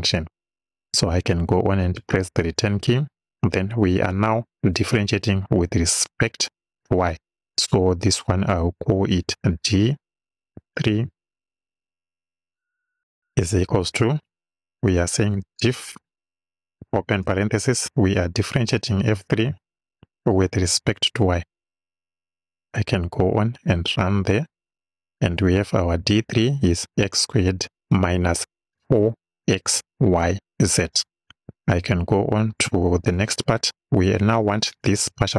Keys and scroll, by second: 2.0 Return, 9.3 d, 10.6 3, 13.6 =, 14.9 d, 15.4 i, 16.9 shift+f, 17.2 shift+9, 18.6 f, 19.2 3, 20.0 ,, 20.7 y, 33.0 Return.